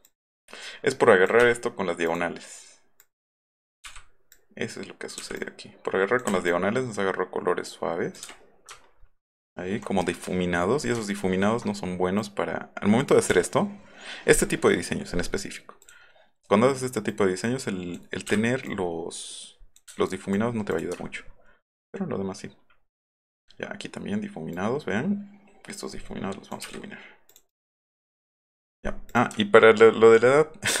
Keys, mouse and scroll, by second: 0.1-1.3 drag, 2.1 click, 3.0 click, 3.9 End, 4.3-5.1 drag, 5.2 End, 5.4 click, 6.3 End, 6.5-8.2 drag, 8.7-9.3 alt+scroll down 3, 11.0-11.4 alt+scroll up 2, 12.2 click, 13.7 middle click, 13.7 scroll down 1, 15.8 click, 17.1 click, 18.3 End, 18.6-19.8 drag, 20.1 click, 20.7 click, 21.0-21.6 alt+scroll up 6, 22.8-23.1 alt+scroll up 4, 24.5-26.5 alt+drag, 26.6 End, 27.3 click, 27.5 click, 29.1 click, 29.5-29.9 alt+scroll down 2, 29.9-30.8 alt+scroll up 1.